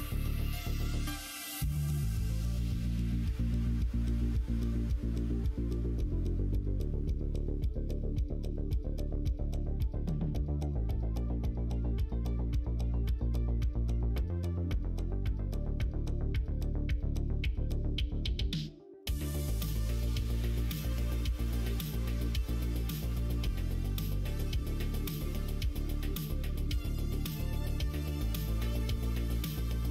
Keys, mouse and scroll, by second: 1.3 click, 1.6 shift+middle click, 2.3 middle click, 2.9 shift+middle click, 3.7-4.7 middle drag, 5.0 middle click, 7.9 middle click, 9.4 shift+click, 10.0 middle click, 10.8 middle click, 11.8 middle click, 12.3 middle click, 14.3 shift+middle click, 15.1 middle click, 16.4 middle click, 17.3 middle click, 18.6 click, 18.9 middle click, 19.8 click, 20.0 middle click, 20.5 shift+middle click, 21.4 middle click, 24.3 middle click, 25.9 click, 27.2 click, 27.7-28.7 middle drag.